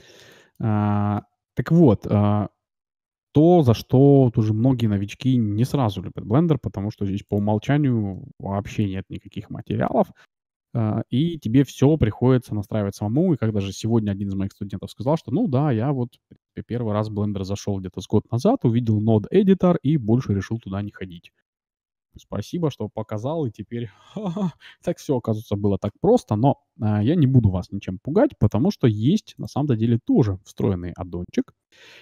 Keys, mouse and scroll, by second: 0.3-2.9 middle drag, 7.2-9.0 drag, 29.3-31.1 drag.